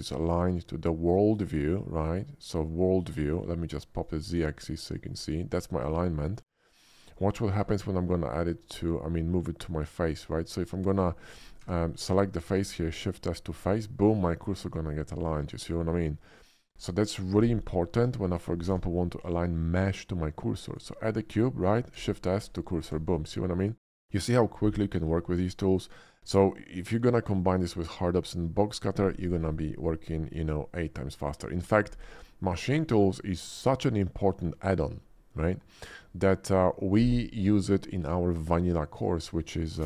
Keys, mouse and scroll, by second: 4.0-5.1 drag, 5.6 middle click, 7.1 middle click, 7.7 shift+s, 8.2 shift+s, 11.6 Tab, 12.0 click, 12.7 shift+s, 13.3 shift+s, 13.4 shift+s, 14.1 middle click, 15.6 middle click, 18.0 Tab, 18.7 shift+a, 20.6 click, 22.0 shift+s, 22.8 s, 23.6 click, 26.5-27.1 middle drag, 27.6 shift+middle drag, 28.0-29.3 shift+middle drag, 33.8-34.2 middle drag, 34.8 shift+middle click.